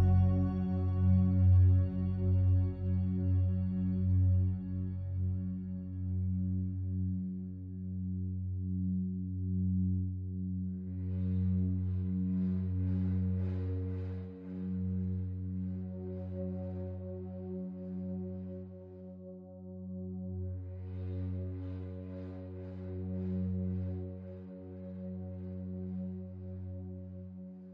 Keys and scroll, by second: 18.8 ctrl+d.